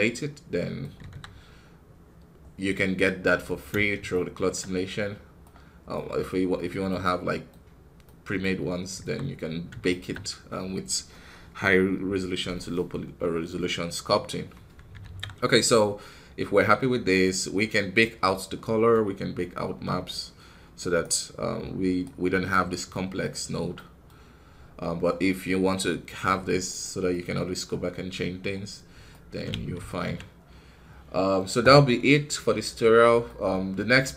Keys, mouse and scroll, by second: 0.9 KP_1, 1.2 scroll down 2, 3.2 scroll up 1, 4.0-6.2 shift+middle drag, 6.2-6.7 scroll up 2, 6.7 middle click, 7.5-7.9 scroll up 1, 7.9 middle click, 8.6 scroll down 1, 8.8 KP_1, 9.7-14.5 shift+middle drag, 14.5-17.8 scroll down 1, 17.8-20.9 middle drag, 20.9-25.1 right drag, 25.1-34.1 middle drag.